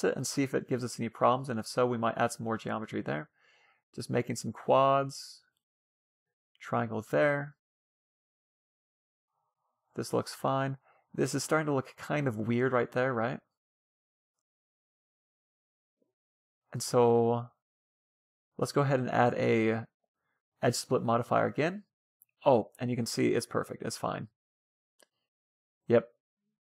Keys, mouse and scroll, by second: 0.9 f, 2.8 f, 5.0 f, 6.6 Tab, 7.3-8.8 middle drag, 9.2-12.4 middle drag, 12.6 Tab, 12.9-15.5 middle drag, 16.2 Tab, 16.4-16.7 scroll up 1, 16.7-18.3 middle drag, 17.4-18.9 right drag, 18.5-20.2 drag, 21.7-24.4 middle drag.